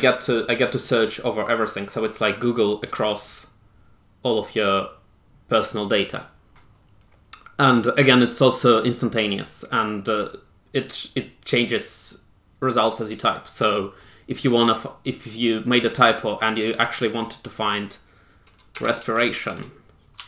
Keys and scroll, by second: 18.7-20.2 typing.